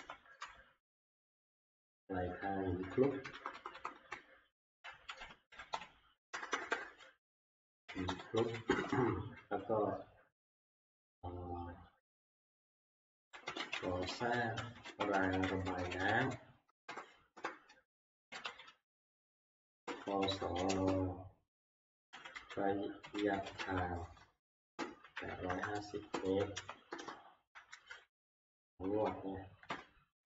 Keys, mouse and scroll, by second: 0.0-1.3 typing, 1.7-2.4 Left, 2.7 Left, 2.9 Left, 3.1 Left, 3.3 Left, 3.5 Left, 3.7 Left, 3.9 Left, 4.9-8.9 typing, 13.1-20.2 typing, 23.2-27.0 typing, 29.0 Right, 29.7 ctrl+Right, 30.1 click, 30.2 ctrl+Right, 30.2 Up, 30.2 Return.